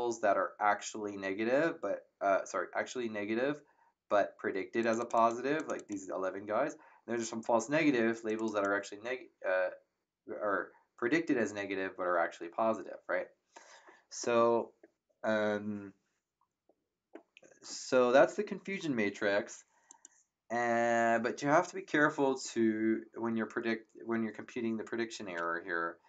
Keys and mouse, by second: 4.8 click, 8.2 click, 19.8 click.